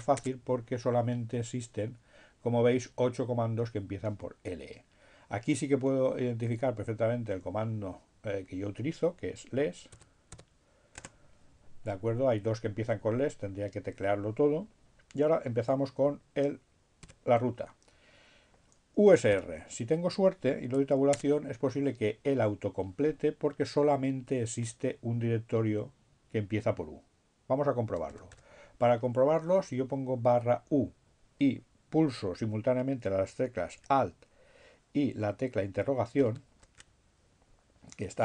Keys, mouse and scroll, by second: 8.0 s, 9.1 space, 16.3 shift+7, 18.0 u, 20.4 Tab, 25.2 BackSpace, 36.0 alt+shift+'.